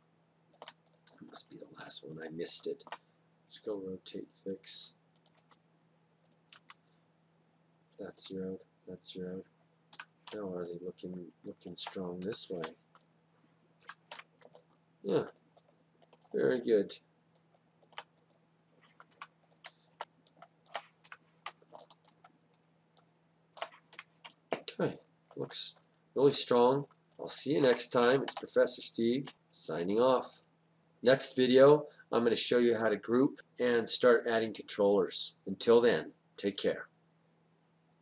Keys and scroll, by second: 6.3 Down, 10.9 F8, 13.2 F8, 20.1 F8, 20.9 space, 22.0 F8, 24.9 F8.